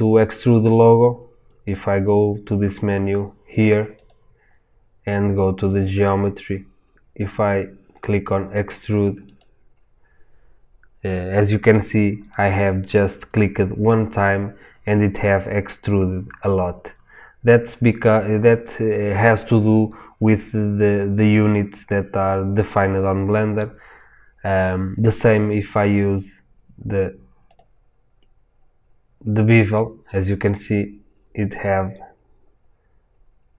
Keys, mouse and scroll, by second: 9.3-33.5 drag.